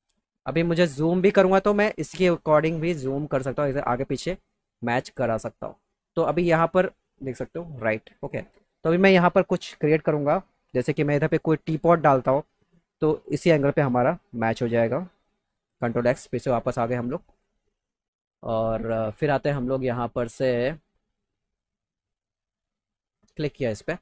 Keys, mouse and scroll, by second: 1.4 middle click, 2.3 middle click, 15.8 ctrl+x, 18.8-19.2 scroll up 2, 23.1 click.